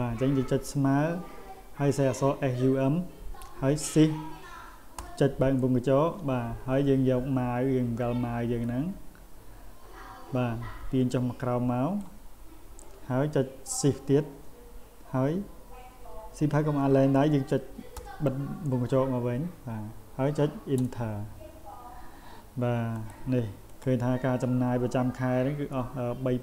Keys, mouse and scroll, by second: 8.6-12.0 drag, 23.0 click, 23.7 click.